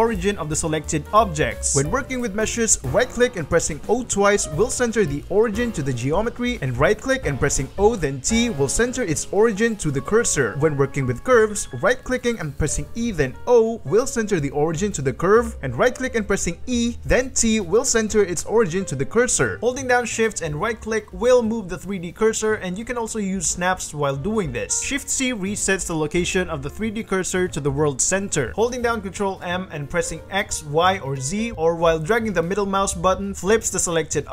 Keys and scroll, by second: 0.4 ctrl+r, 1.9 shift+g, 2.6 ctrl+., 2.9 g, 3.9 o, 4.3 Escape, 5.9 g, 6.1 o, 6.5 o, 7.8 o, 8.2 t, 8.9 o, 10.7 shift+a, 11.2 g, 12.5-15.0 typing, 16.1 e, 16.9 t, 19.6 t, 25.2 shift+d, 25.5 shift+c, 26.4 shift+c, 27.6 Escape, 28.0 shift+a, 29.2 ctrl+alt+m, 29.8 x, 30.5 y, 31.1 z, 31.7 ctrl+m.